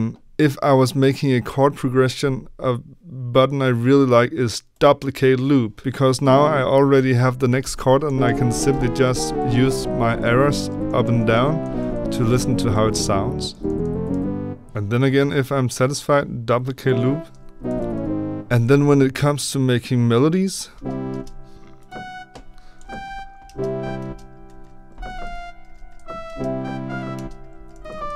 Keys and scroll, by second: 8.0 Up, 8.2 Up, 8.4 Up, 8.6 Up, 9.0 Down, 9.6 Down, 10.2 Down, 10.6 Up, 11.3 Up, 12.2 Down, 12.4 Down, 14.6 Up, 17.5 Down, 17.6 Down, 17.7 Down, 17.9 Down, 18.4 Up, 20.7 b, 22.7 Up, 24.4 ctrl+d, 24.8 Down, 25.0 Down, 25.2 Right, 25.7 ctrl+d, 25.9 Down, 27.4 ctrl+d, 27.7 Down, 27.8 Down, 28.0 Right.